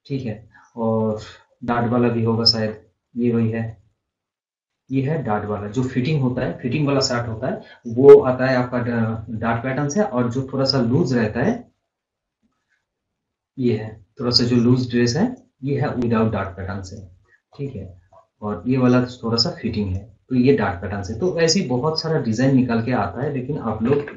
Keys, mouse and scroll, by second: 0.7 scroll up 1, 2.0-2.3 scroll down 1, 2.4-2.8 scroll up 1, 3.6 scroll down 1, 3.9-4.3 scroll up 1, 5.1-8.2 drag, 10.7-11.1 scroll down 1, 15.1-17.3 drag, 17.3 scroll up 1, 19.7-21.2 drag, 21.2-22.3 scroll down 1, 23.0-24.1 drag.